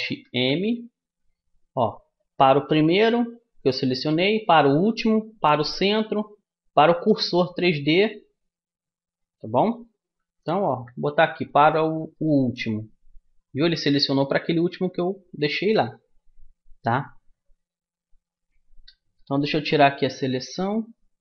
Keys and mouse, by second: 0.2 alt+m, 10.6 alt+m, 17.5 ctrl+z.